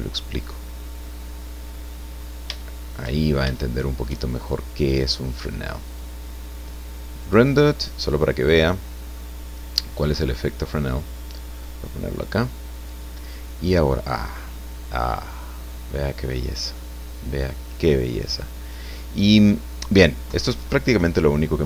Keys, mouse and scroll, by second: 1.3 scroll down 2, 1.8-3.1 middle drag, 3.2 shift+scroll up 2, 3.5 shift+middle click, 5.8 click, 7.2 click, 8.5 scroll down 2, 9.2 middle click, 11.6-13.1 drag, 14.5-16.0 middle drag, 16.4-18.3 middle drag.